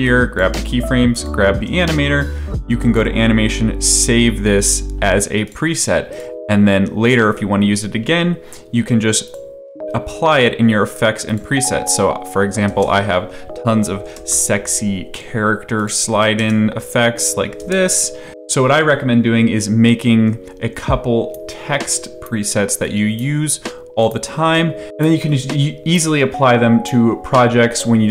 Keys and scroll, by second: 13.6-14.6 typing, 16.3 space, 17.6 space, 24.4 space.